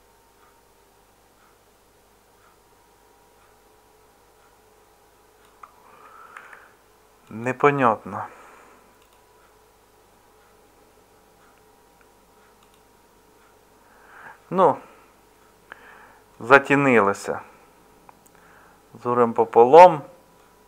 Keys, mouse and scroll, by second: 6.3 ctrl+z.